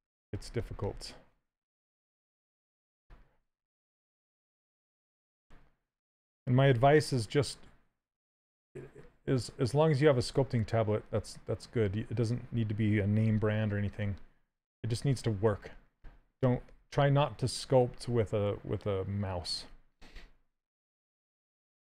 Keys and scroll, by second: 2.1 s, 6.4 w, 13.5 q, 14.7 s.